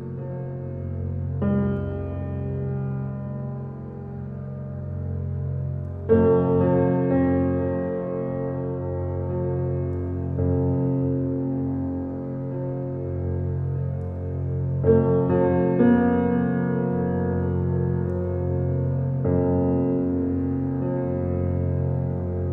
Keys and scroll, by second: 9.3 b.